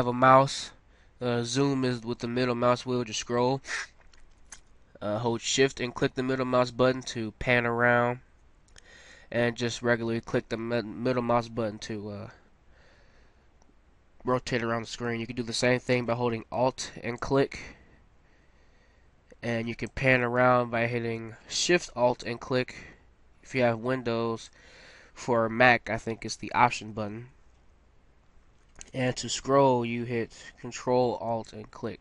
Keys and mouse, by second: 1.7-5.0 middle drag, 6.2-7.9 middle drag, 9.6-11.6 middle drag, 17.2-25.0 middle drag, 31.5-32.0 middle drag.